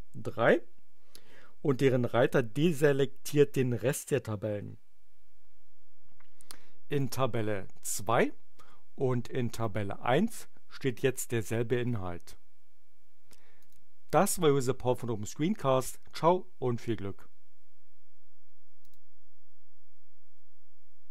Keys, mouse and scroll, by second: 6.9 click, 9.5 click, 13.6 click, 18.8 click.